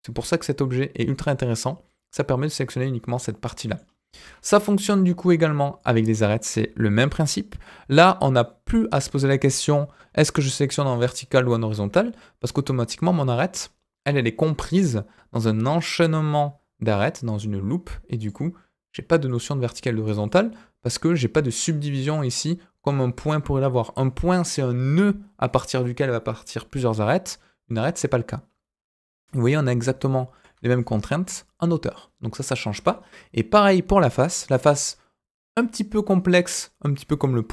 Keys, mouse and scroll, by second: 4.5 KP_1, 5.7 click, 6.1 scroll up 2, 6.9 alt+click, 9.6-10.0 alt+scroll up 2, 10.1-10.4 alt+scroll down 2, 10.8-11.8 scroll up 2, 12.3 alt+click, 18.1 alt+click, 19.2 alt+click, 20.2 alt+click, 28.4-28.8 scroll down 3, 29.0 middle click, 30.3 alt+click, 30.7-31.9 middle drag, 32.7 KP_1, 34.1 click, 34.5 scroll up 2.